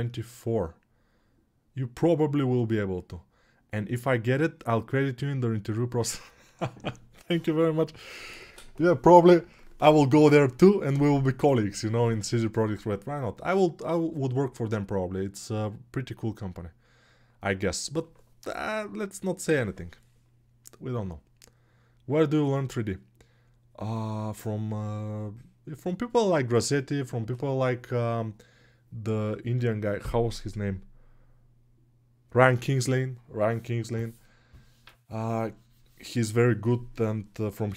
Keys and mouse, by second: 29.4-37.7 drag.